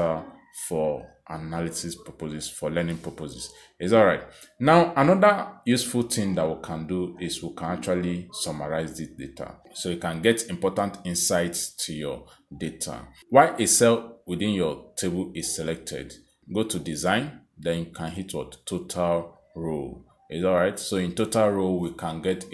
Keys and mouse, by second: 1.1 click, 2.4 click, 3.3 click, 9.8 click, 11.5 click, 17.5 click.